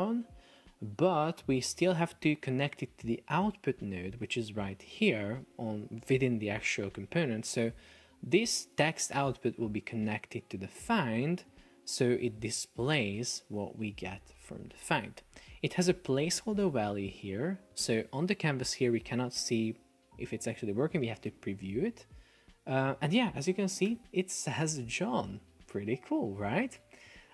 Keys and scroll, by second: 21.5 super+p, 23.9 super+r, 26.9 Escape.